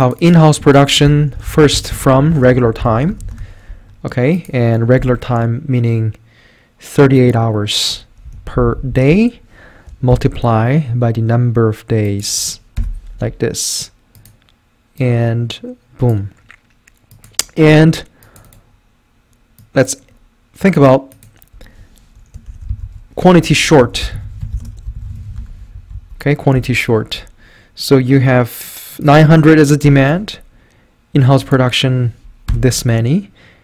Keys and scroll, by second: 0.8-3.6 typing, 4.7-5.5 typing, 8.3 F4, 9.1-10.1 typing, 12.8 Return, 22.2-27.0 typing, 25.8 Right, 26.0 Up, 29.6-30.3 typing, 32.5 Return.